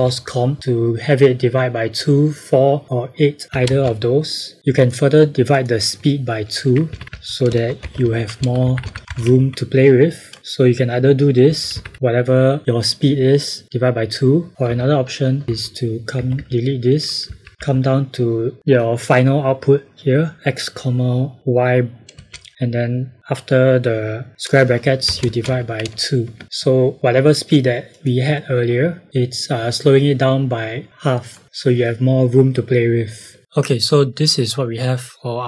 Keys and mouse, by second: 33.4 click.